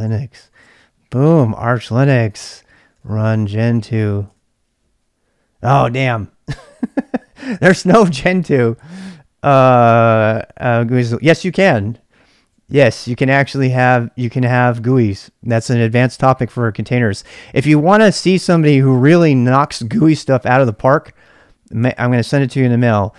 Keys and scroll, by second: 0.0-4.7 typing, 6.5-7.3 typing, 13.3-14.4 typing, 22.3 s, 22.4 space.